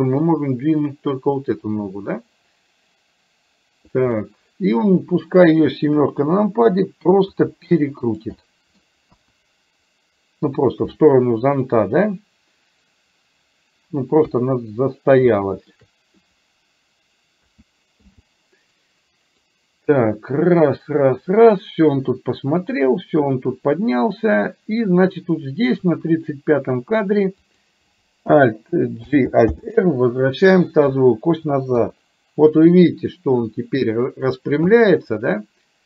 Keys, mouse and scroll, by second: 0.5-4.0 drag, 4.1 middle click, 6.0 KP_7, 7.3 r, 8.5 middle click, 9.2 KP_1, 14.2 KP_1, 15.3 shift+middle click, 17.5 a, 18.1 i, 19.6-25.8 drag, 27.5 click, 29.1 alt+g, 29.6 alt+r, 31.7 KP_3.